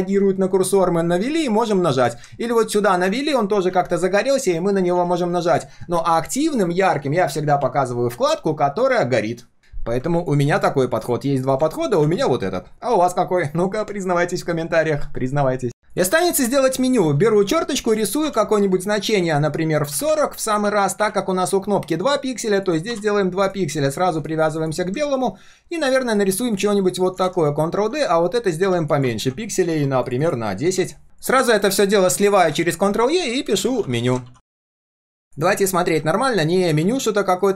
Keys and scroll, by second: 1.6 ctrl+z, 4.9 ctrl+z, 27.3 ctrl+d, 32.0 ctrl+e, 32.6 ctrl+r, 34.2 ctrl+s.